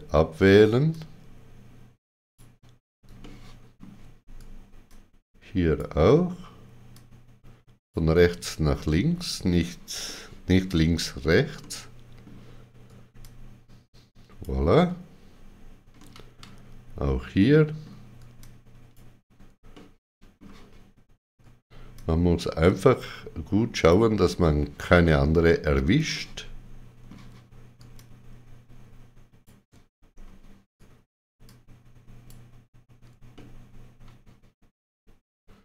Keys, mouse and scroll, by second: 0.9 ctrl+click, 3.2 shift+middle click, 4.8 ctrl+click, 6.9 ctrl+click, 8.8 middle click, 10.0 shift+middle click, 11.6 shift+middle click, 13.2 ctrl+click, 16.0 middle click, 16.1 scroll, 17.4 middle click, 18.4 ctrl+click, 19.7 middle click, 21.9 ctrl+click, 25.4 middle click, 26.1 shift+middle click, 27.9 ctrl+click, 31.4 ctrl+click, 33.3 middle click.